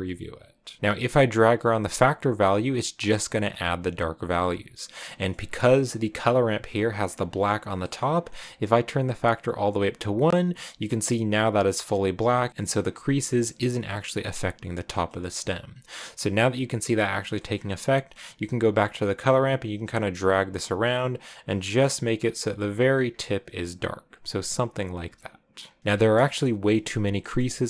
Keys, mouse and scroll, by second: 1.4-4.9 drag, 4.9 middle click, 5.5-6.0 scroll down 1, 6.0 click, 7.7 middle click, 7.9-10.5 drag, 10.5 middle click, 10.5-11.0 scroll up 2, 11.5 middle click, 11.5-12.3 scroll down 1, 12.3-16.5 shift+middle drag, 16.5-17.6 drag, 17.6-18.7 scroll up 3, 18.7-22.9 drag, 19.8 Left, 22.9 scroll down 1, 23.1-25.8 middle drag, 25.8 scroll down 6, 26.0 right click, 26.1 KP_0, 27.0-27.6 scroll down 6, 27.1 shift+middle click.